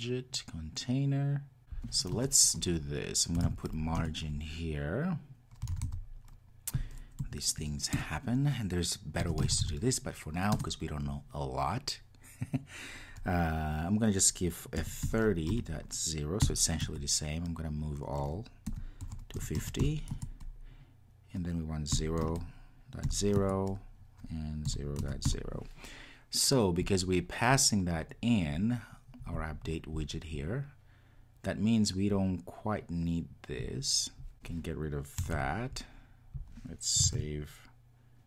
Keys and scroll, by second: 4.0 Return, 37.2 super+s.